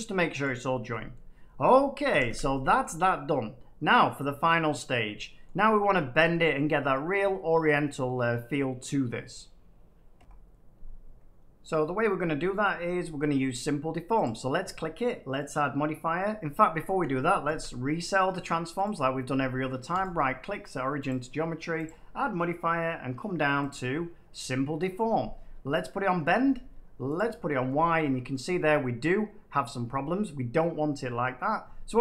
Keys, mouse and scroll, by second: 0.4 right click, 0.6-1.1 scroll up 3, 1.1 middle click, 1.4 middle click, 2.1 a, 2.2 a, 2.7 shift+middle click, 3.5 shift+scroll, 3.6 shift+middle click, 5.4 middle click, 6.6-9.2 middle drag, 10.1 F9, 13.5 middle click, 14.2 click, 15.3 click, 16.9 click, 17.4 ctrl+a, 18.8 click, 28.4 middle click.